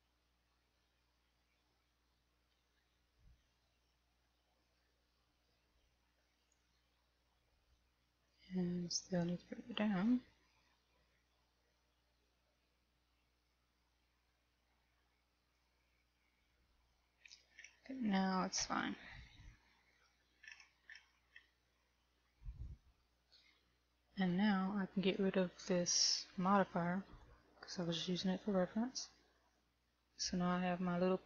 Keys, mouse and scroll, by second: 1.5 shift+middle click, 2.4 shift+middle click, 4.1 middle click, 5.9 Tab, 6.8 right click, 10.3 click, 17.4 Tab, 17.9-18.2 scroll down 3, 19.6 shift+middle click, 21.5-22.6 scroll down 3, 22.6 shift+middle click, 22.6 scroll down 2, 24.6 KP_1, 25.6 right click, 27.6 click, 29.6 middle click.